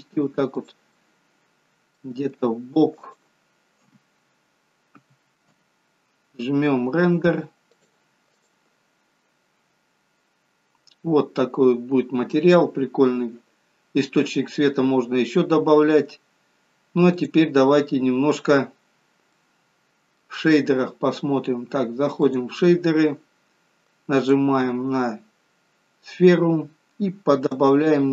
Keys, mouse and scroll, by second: 1.0 middle click, 2.3 g, 3.9 KP_0, 5.1 KP_0, 7.8 click, 18.2-18.9 scroll up 2, 18.9-19.5 scroll up 2, 19.5 middle click.